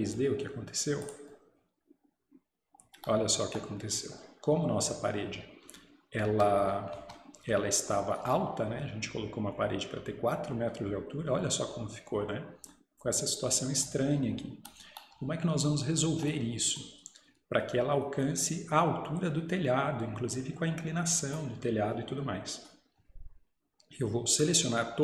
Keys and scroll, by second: 6.3 Escape, 7.0 Escape.